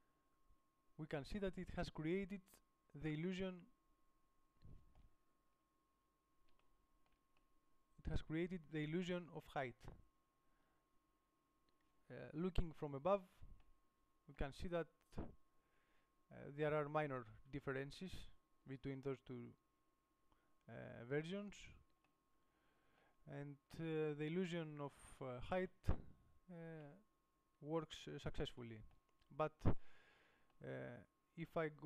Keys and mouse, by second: 0.9 middle click, 1.4-4.8 middle drag, 5.6 KP_7, 10.2-11.4 middle drag, 11.6 middle click, 12.7 middle click, 12.7 KP_7, 21.2-22.7 middle drag.